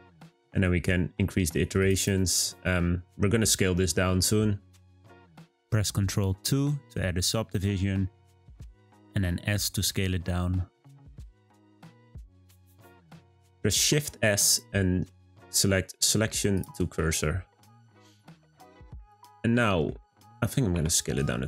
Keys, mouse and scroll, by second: 1.8-2.5 drag, 2.5 scroll down 2, 2.7-3.2 scroll up 1, 3.7 scroll down 3, 4.0-4.6 scroll up 2, 6.6 ctrl+2, 7.8 shift+scroll up 1, 7.9-9.8 shift+middle drag, 9.8 s, 12.3-13.2 shift+middle drag, 13.2-13.7 scroll up 1, 13.7 shift+s, 17.5-17.8 scroll up 1, 17.8 click, 18.3-20.3 middle drag, 20.3 click, 20.7 s.